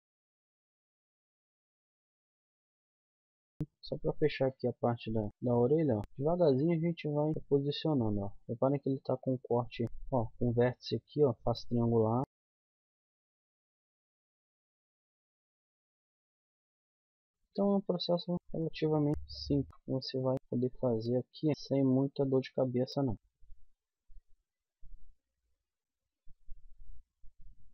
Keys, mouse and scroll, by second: 0.2 middle click, 1.0 k, 1.9 click, 2.1 middle click, 2.5 k, 3.5 middle click, 5.3 middle click, 6.0 right click, 6.2 g, 7.3-8.5 right drag, 7.3 g, 7.4 g, 8.5 click, 8.9 middle click, 10.1 middle click, 12.2 KP_1, 12.8 middle click, 13.4 g, 13.6 middle click, 14.6 middle click, 14.9 g, 15.9 middle click, 16.3 middle click, 16.7 middle click, 17.1 click, 17.6 middle click, 17.7-19.1 drag, 19.1 middle click, 19.4 click, 19.7-23.1 middle drag, 23.1-24.1 drag, 25.9 middle click, 27.0-27.7 middle drag.